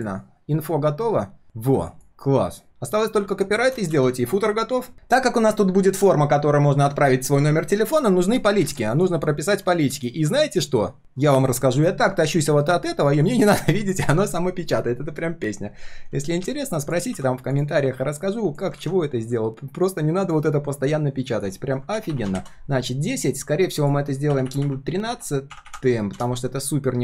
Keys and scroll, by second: 3.9 ctrl+s, 18.8 ctrl+z.